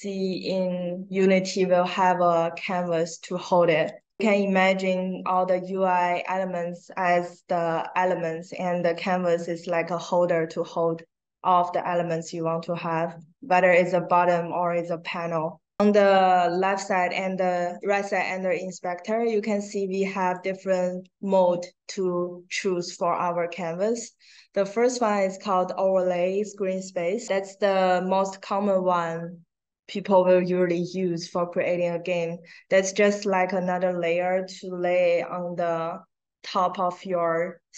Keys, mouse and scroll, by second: 3.8 click, 4.1-5.2 drag, 20.1 click.